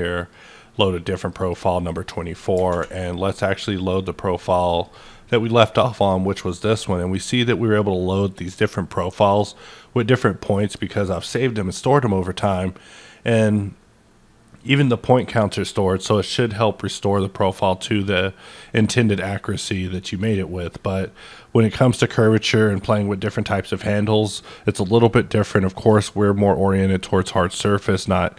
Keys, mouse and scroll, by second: 0.2 click, 1.2 click, 1.4 double click, 2.2 middle click, 2.7 ctrl+`, 3.6 click, 4.7 click, 4.9 double click, 5.4-9.6 middle drag.